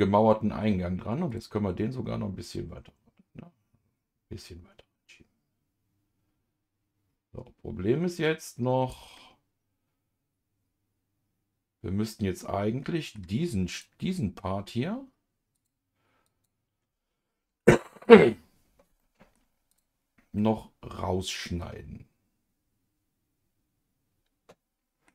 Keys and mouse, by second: 1.3 click, 2.4 click, 3.3-9.1 drag, 9.2-13.1 middle drag, 13.7-15.1 drag, 16.2-19.0 drag, 19.0 middle click, 19.7 click, 20.3-25.1 middle drag.